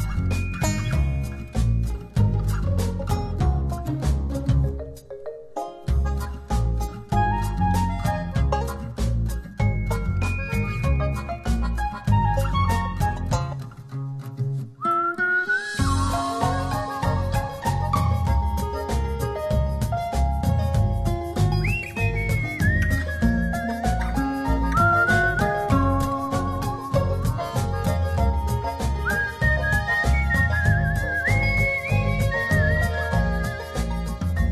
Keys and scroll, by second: 13.5 shift+Right, 13.9 shift+Down, 14.4 shift+Right, 14.9 shift+Down, 15.9 shift+Up, 18.2 Up, 19.1 Up, 20.7 Up, 21.2 Up, 21.6 Left, 22.0 Up.